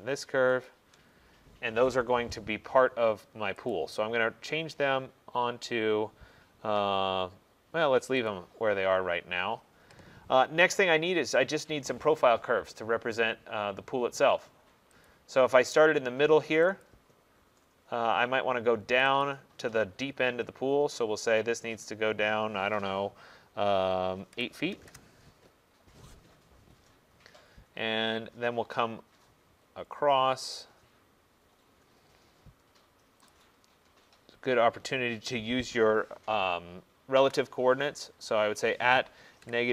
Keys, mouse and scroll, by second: 0.7 shift+click, 1.1 middle click, 2.6 middle click, 3.8 right click, 8.4 click, 9.0 middle click, 15.1 click, 16.9 click, 19.1 click, 19.3 click, 20.4 middle click, 24.4-25.3 typing, 26.4-27.1 typing, 29.6-32.1 scroll, 32.1-33.4 scroll, 33.4 click, 34.4 scroll, 37.2 shift+2, 39.5 -.